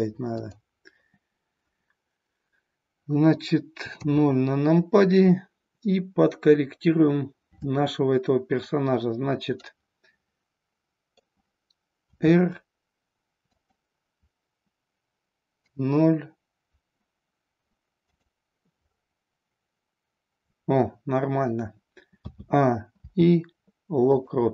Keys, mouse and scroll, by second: 0.4 click, 3.9 KP_0, 9.5-11.3 middle drag, 12.0 r, 13.6 click, 15.5 KP_0, 22.1 a, 22.9 i.